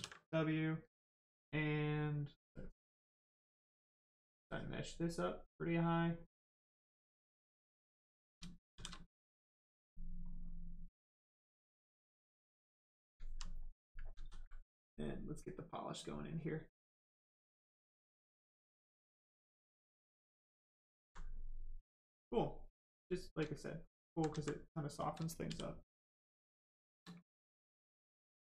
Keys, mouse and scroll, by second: 0.2 right click, 2.5 click, 8.7 shift+f, 9.1 click, 12.5 right click, 13.3 alt+right click, 13.9 ctrl+right click, 14.1 ctrl+z, 15.5 click, 16.3 click, 18.4 click, 20.9 alt+right click, 21.5 right click, 23.0 shift+right click, 24.3 alt+right click, 25.1 shift+right click, 25.4 shift+f, 27.3 right click.